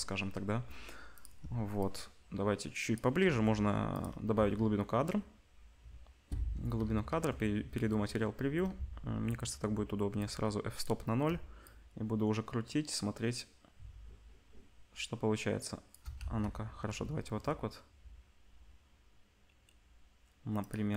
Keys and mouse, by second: 1.1 click, 1.2 shift+middle click, 1.8-4.0 shift+drag, 4.0-10.2 middle drag, 4.3 z, 6.8 z, 9.0 ctrl+s, 10.2-20.7 drag, 16.1 z, 20.7-20.9 middle drag.